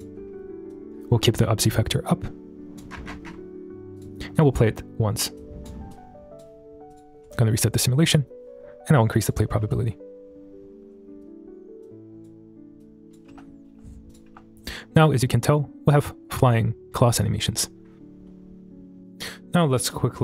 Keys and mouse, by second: 0.7-2.8 drag, 4.0 click, 4.4 click, 5.4 click, 5.9 click, 6.9 click, 7.3 shift+middle drag, 8.9-9.3 drag, 11.2 space, 11.8 click, 12.8-13.2 drag, 13.7 space, 14.1 click, 15.3 space, 17.4 shift+middle drag.